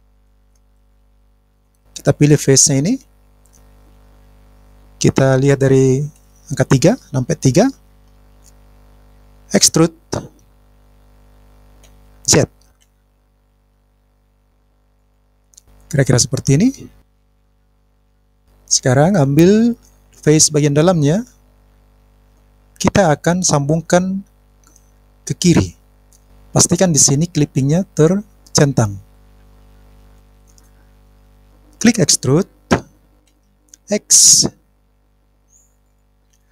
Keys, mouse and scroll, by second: 0.0 click, 3.6 click, 6.1 KP_3, 11.9 e, 14.9 click, 16.3-18.4 middle drag, 30.2 click, 33.3 e, 34.2 x.